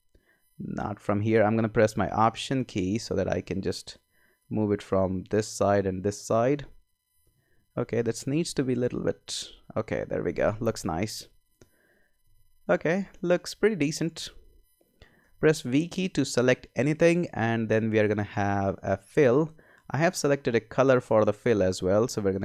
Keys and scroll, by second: 12.2 Escape, 15.2 v.